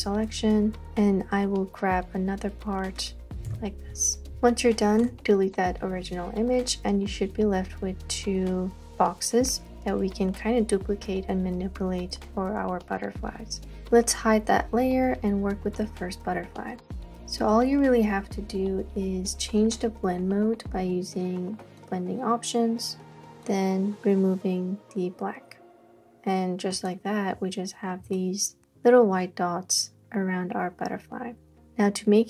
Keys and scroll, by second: 3.5 super+j, 5.1 BackSpace, 28.1 space, 28.6 space, 28.6 space.